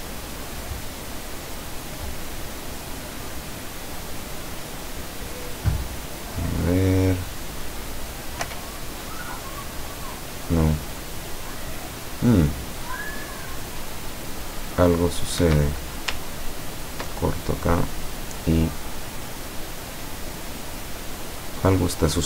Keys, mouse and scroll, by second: 0.4-2.1 drag, 8.5 p, 15.5 Escape, 16.5-17.3 ctrl+drag, 17.8-19.1 drag, 20.0-22.1 middle drag.